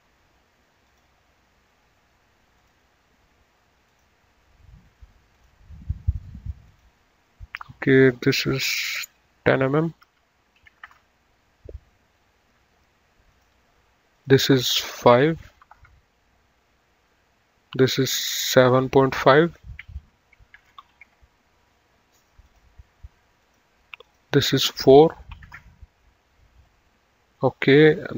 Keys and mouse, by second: 0.9 click, 2.7 click, 4.2 click, 5.6 click, 6.7 click, 7.7 right click, 9.0 click, 10.8 KP_1, 11.0 KP_0, 11.2 KP_Enter, 13.6 click, 15.8 KP_5, 16.1 KP_Enter, 17.9 click, 20.6-21.4 typing, 21.4 Return, 22.6 click, 25.6 KP_4, 25.8 Return.